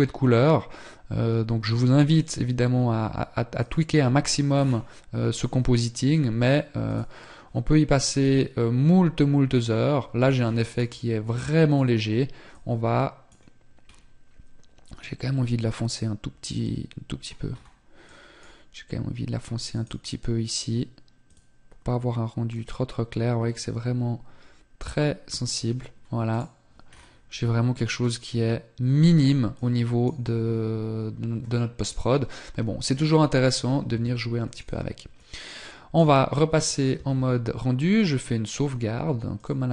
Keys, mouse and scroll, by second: 35.2 click, 35.8 ctrl+s, 37.8 click.